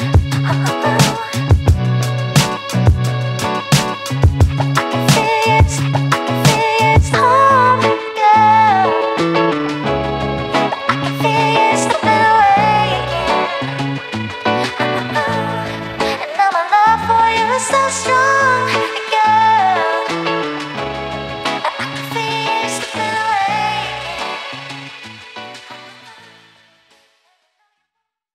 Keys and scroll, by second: 11.7 Right.